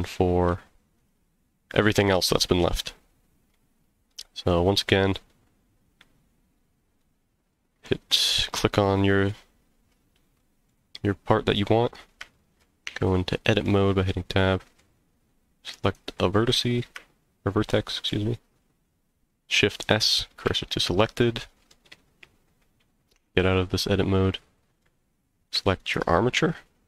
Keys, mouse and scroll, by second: 0.9 click, 4.1-5.1 middle drag, 7.0-7.8 middle drag, 10.4 middle drag, 11.4-12.3 scroll up 2, 12.3-12.6 shift+middle drag, 12.9 Tab, 13.6-14.8 middle drag, 15.8 click, 18.1 shift+s, 21.1 middle click, 22.0 scroll down 1, 22.7 scroll down 1, 23.1 Tab, 24.2-24.8 middle drag, 25.8 click.